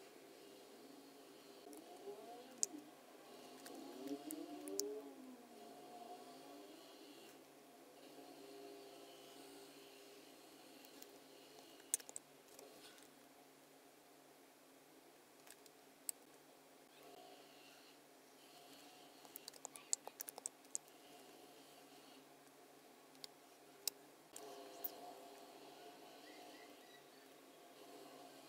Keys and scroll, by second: 2.5 super+F9, 12.4 super+F9, 15.6 space, 20.6 super+F9, 23.2 space.